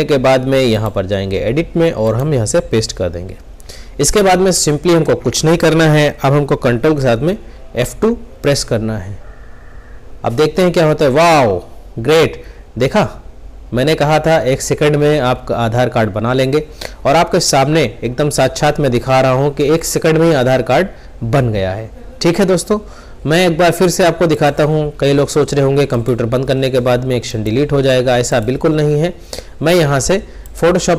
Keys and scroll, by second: 7.6 ctrl+F2.